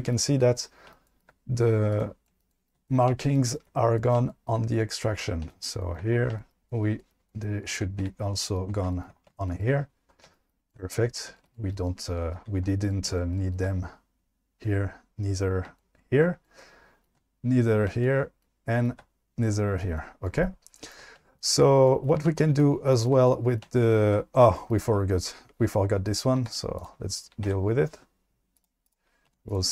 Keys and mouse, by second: 1.9 click, 4.3 shift+middle drag, 26.5 q, 27.5 Tab, 29.3 2.